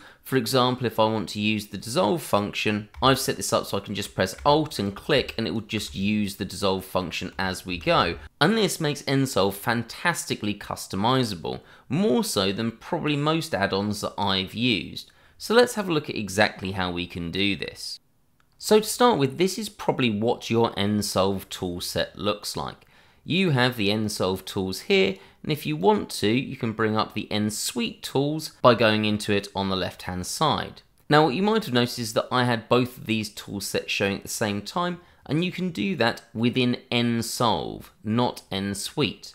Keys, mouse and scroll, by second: 3.2 alt+click, 3.3 click, 3.4 alt+click, 4.5 click, 4.6 alt+click, 5.4 click, 5.4 alt+click, 6.1 click, 6.6 alt+click, 7.7 ctrl+z, 25.0 click, 26.6 click, 30.3 click, 32.7 click, 35.7 click.